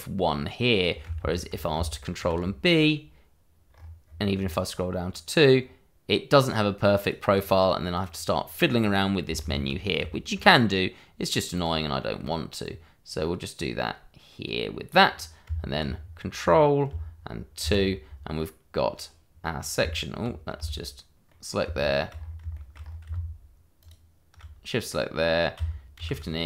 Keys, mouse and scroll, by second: 1.2 ctrl+z, 2.1 ctrl+b, 3.7-4.0 scroll up 1, 4.0-4.3 scroll down 1, 5.0-5.6 scroll up 1, 7.0 click, 8.9-9.2 scroll up 1, 9.4 ctrl+z, 9.7-10.1 ctrl+scroll down 1, 10.1 shift+middle click, 11.5 click, 15.1-15.4 scroll down 1, 15.4 Tab, 15.9-16.4 scroll down 1, 16.4 middle click, 17.6 ctrl+2, 18.0-18.3 scroll down 1, 18.3 middle click, 19.8 Tab, 21.1 click, 21.3-21.8 scroll down 1, 21.8 shift+middle click, 22.1-23.5 shift+scroll up 3, 22.5 shift+middle click, 23.8 alt+shift+click, 24.6 click, 25.9 shift+e.